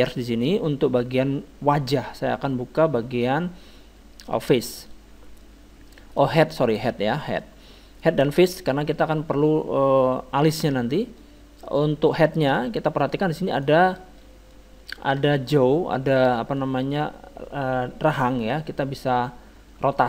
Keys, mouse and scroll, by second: 3.3-10.2 drag, 5.4 middle click, 7.2 middle click, 9.0 middle click, 10.6-12.4 drag, 11.2-14.6 middle drag, 13.5-15.4 right drag, 15.5-18.2 middle drag.